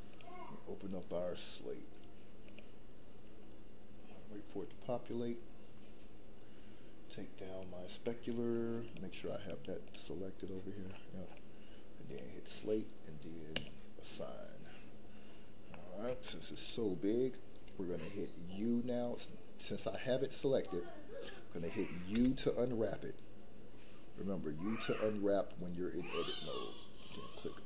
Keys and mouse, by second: 7.5 click, 9.8 click, 12.1 click, 15.7 middle click, 16.2 shift+middle click, 19.8 click, 22.1 u.